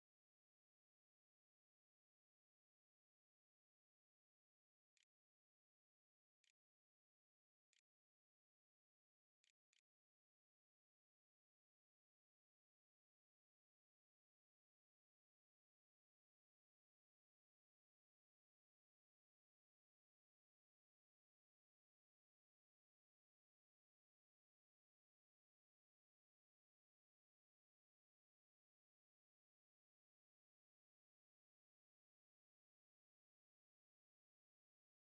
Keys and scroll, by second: 3.5-7.0 typing, 5.2 shift+Return, 7.5 Return, 8.6 ', 9.0 /, 9.5 /, 10.0 ., 34.7-35.0 typing.